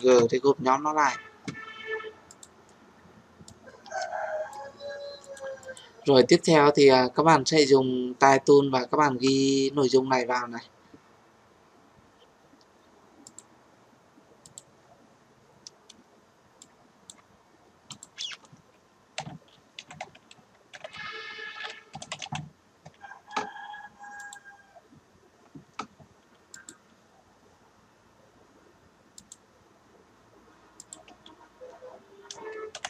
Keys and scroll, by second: 32.7 ctrl+j.